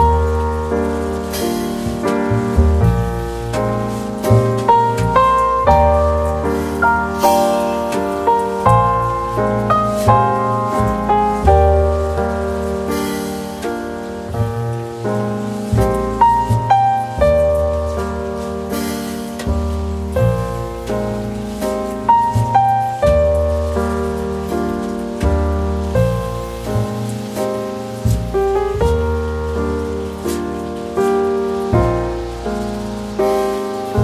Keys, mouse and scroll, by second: 1.0 shift+click, 21.9 shift+click.